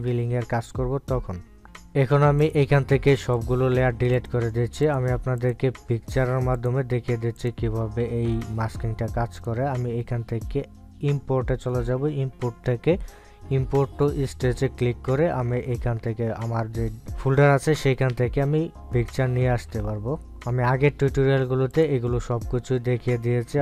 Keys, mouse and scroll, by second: 3.9 click, 13.0 click, 23.2 click.